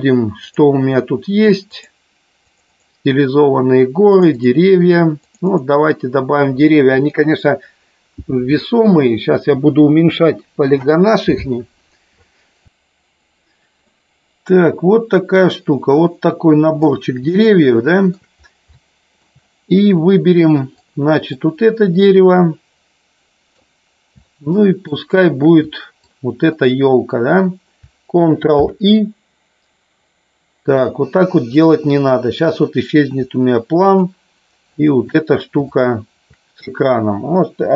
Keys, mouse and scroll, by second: 13.9-14.5 middle drag, 15.3-16.8 drag, 17.3-18.3 shift+middle drag, 18.8-19.3 shift+middle drag, 20.9 click, 22.4-23.6 middle drag, 24.2 shift+middle click, 26.0-26.6 shift+drag, 28.5 ctrl+i, 33.8 shift+click, 34.8 shift+click, 35.5 shift+click.